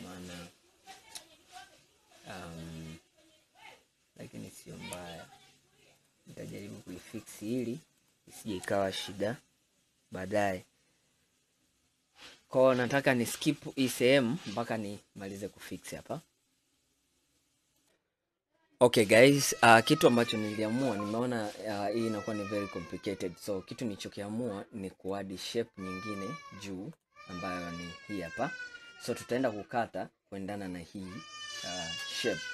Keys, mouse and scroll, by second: 4.6 click, 5.2 shift+click, 6.1 shift+click, 6.6 shift+click, 7.1 shift+click, 7.6 shift+click, 8.1 shift+click, 21.2-22.0 scroll down 2, 22.0 scroll up 2, 23.5-23.8 scroll up 2, 23.8-24.6 scroll down 2, 24.6-25.5 middle drag, 25.5 scroll down 2, 26.1 middle click, 27.0 click, 27.7-28.3 middle drag, 28.3 click, 31.2-31.8 scroll down 1, 31.9 scroll up 1, 32.3-32.5 scroll down 2.